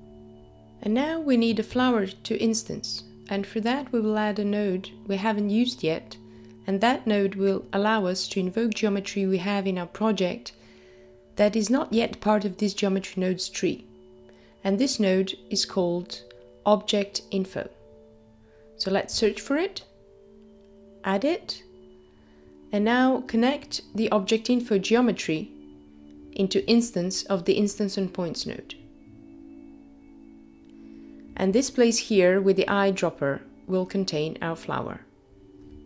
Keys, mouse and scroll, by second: 3.7 click, 16.8 click, 17.9 shift+a, 18.0 click, 27.7 click, 30.5 click.